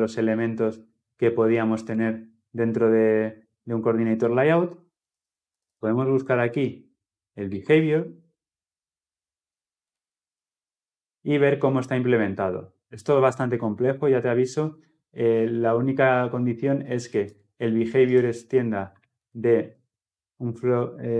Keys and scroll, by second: 4.9 ctrl+f, 9.8 ctrl+b, 19.1 ctrl+b, 20.4 ctrl+b.